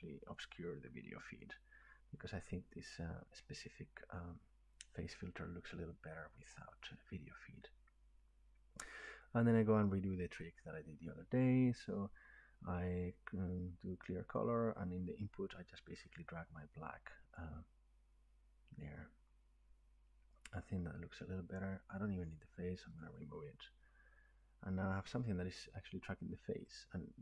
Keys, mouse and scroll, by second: 0.3 click, 9.6 click, 12.4-14.7 drag, 17.3-22.5 drag.